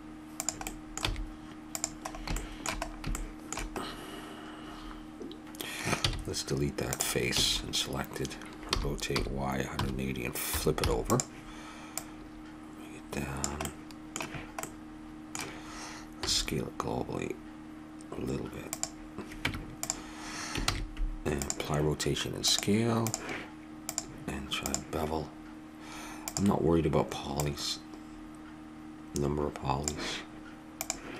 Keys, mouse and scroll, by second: 0.7 middle click, 1.0 e, 4.9-6.0 middle drag, 6.0 x, 7.3 a, 8.7 r, 11.9-13.7 drag, 13.7-15.8 middle drag, 16.2 s, 19.5 Tab, 20.6 ctrl+a, 22.5-25.7 drag, 26.3-29.1 drag, 30.7-31.1 drag.